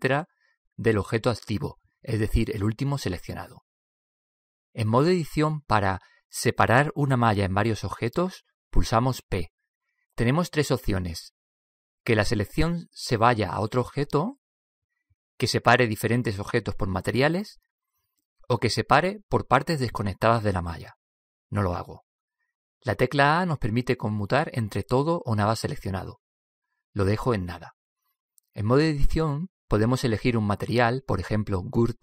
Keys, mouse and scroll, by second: 7.2 p, 9.8 p, 25.3 a, 25.8 a, 27.9 a, 28.4 middle click, 29.5 middle click.